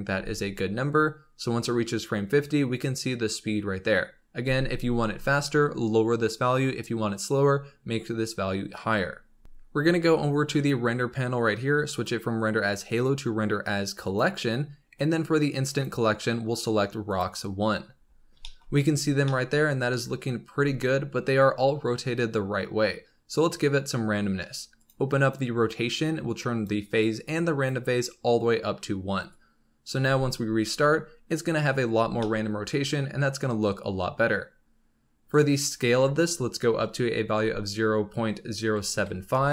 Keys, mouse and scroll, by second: 0.1 space, 4.4 space, 10.5-11.2 drag, 11.2-11.9 scroll down 4, 11.9-14.9 drag, 14.9-15.6 scroll down 4, 15.6-18.0 drag, 18.0-18.4 scroll up 4, 18.4 shift+middle click, 18.9-19.2 scroll up 3, 19.2-22.2 middle drag, 24.7 click, 25.1-30.0 drag, 30.0 space, 31.8 scroll down 2, 31.9 space, 32.1-33.7 middle drag, 33.7 scroll up 1, 35.2-38.4 drag.